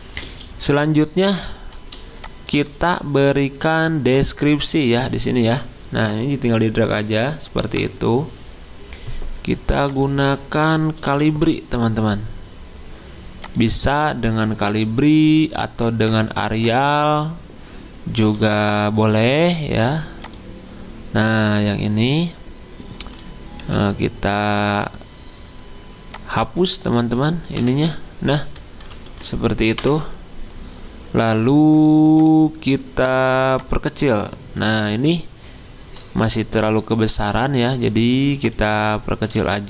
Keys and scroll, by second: 11.0-12.0 typing, 18.2 d, 23.6 t, 27.6 BackSpace, 28.9 ctrl+shift+Down, 29.8 BackSpace, 36.6 ctrl+t, 39.4 ctrl+a.